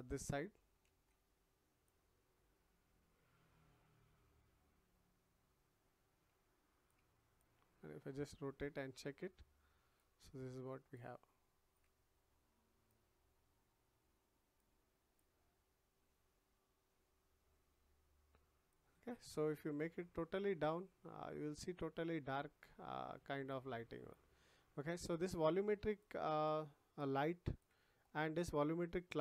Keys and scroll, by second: 0.8 ctrl+z.